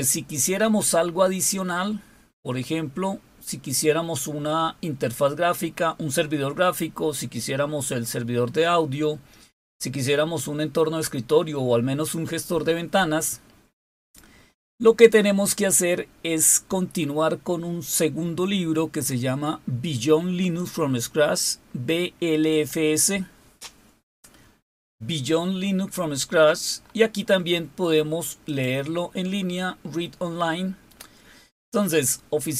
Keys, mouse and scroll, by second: 13.7 click, 20.3 click, 23.8-24.6 scroll down 2, 25.7-26.5 scroll down 2, 26.5-27.5 scroll up 2, 28.2 click, 30.6-31.6 scroll down 3.